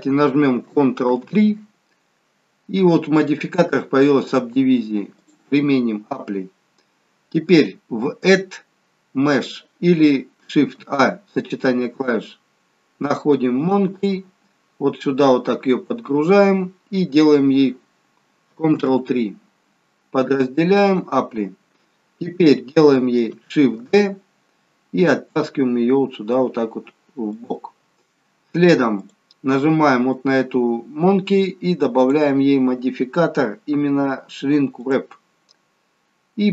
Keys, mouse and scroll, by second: 1.1 ctrl+3, 3.2 click, 5.1 click, 6.3-7.8 scroll down 2, 8.2 click, 10.7 shift+a, 15.2-15.8 scroll up 2, 15.8-16.4 scroll up 1, 18.9 ctrl+3, 20.8 click, 24.1 shift+d, 28.9 click.